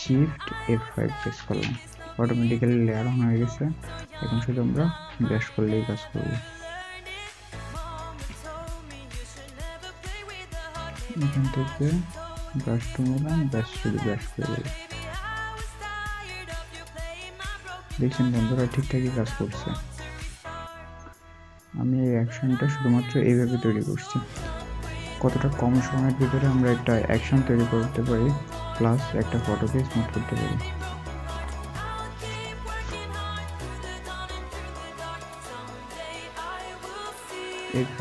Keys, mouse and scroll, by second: 1.0 shift+F5, 4.3 alt+scroll, 4.4-5.2 alt+scroll up 1, 11.3 right click.